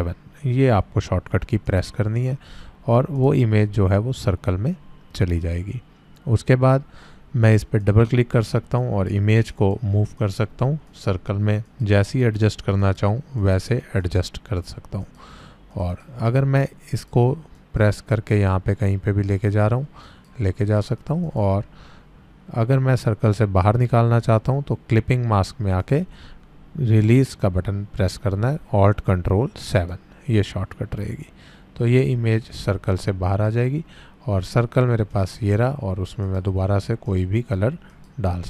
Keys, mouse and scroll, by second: 1.7 click, 7.4 click, 20.0 click, 23.6 click, 29.7 click, 35.1-38.4 drag.